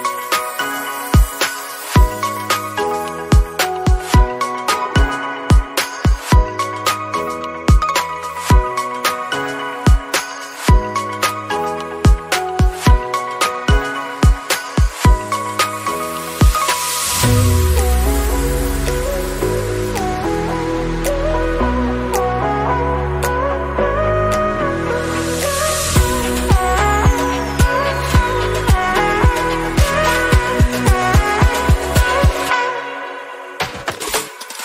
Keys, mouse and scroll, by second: 10.0-11.1 drag, 11.6-12.5 drag, 25.0-26.2 drag, 31.7-34.6 drag.